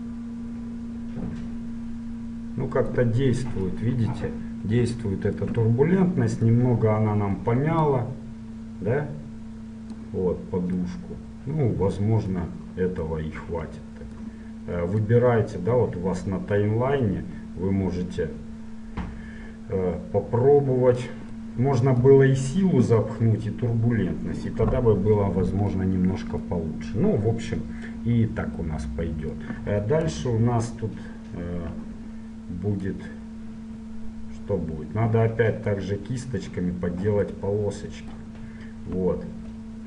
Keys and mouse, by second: 3.5-4.5 middle drag, 7.9-9.8 drag, 10.5-15.1 middle drag, 15.2-17.0 drag, 21.5-23.2 middle drag, 24.6-31.1 middle drag, 30.2 KP_7, 33.0-34.9 drag, 37.4-39.8 middle drag.